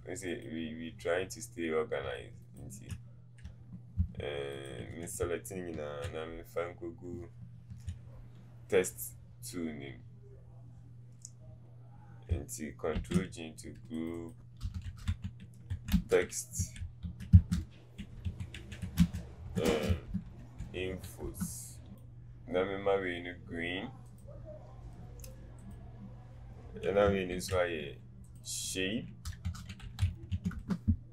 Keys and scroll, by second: 5.2 typing, 16.8-21.2 typing, 27.5 ctrl+g.